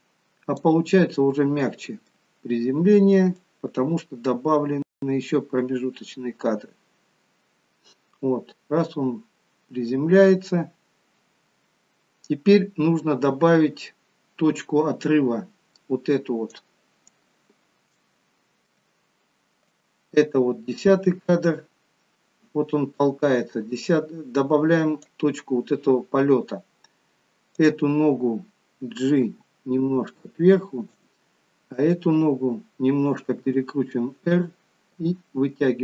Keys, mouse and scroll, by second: 3.8 middle click, 3.8 click, 18.0 shift+middle click, 19.9 click, 27.6 click, 29.3 g, 31.8 click, 33.5 r, 35.0 g.